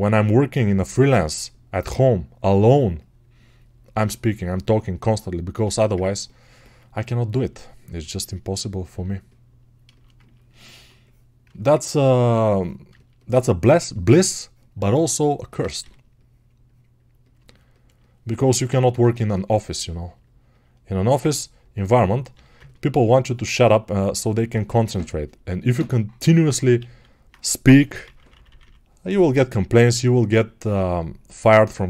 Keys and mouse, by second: 6.9-11.4 alt+drag, 11.4-18.4 ctrl+alt+shift+right drag, 25.3-31.8 alt+right drag.